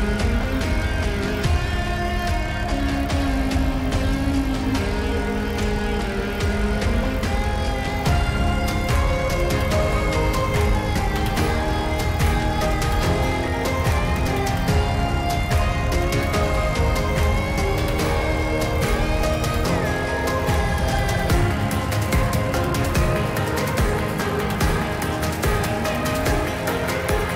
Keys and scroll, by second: 2.4 ctrl+z.